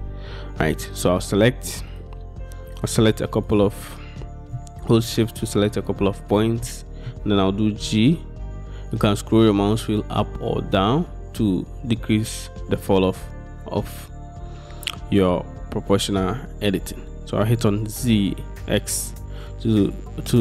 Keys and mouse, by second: 2.9 middle click, 3.5 middle click, 3.9 middle click, 6.3 shift+middle click, 6.7 middle click, 7.8 g, 18.0 x.